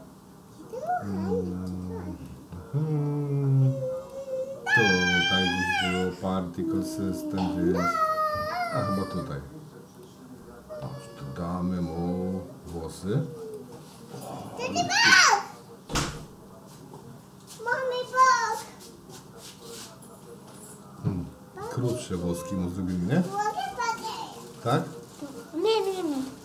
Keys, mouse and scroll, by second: 4.0 click, 7.1 click, 8.6 click, 10.0 click, 13.4 click, 17.8-20.6 drag, 21.3-26.1 drag.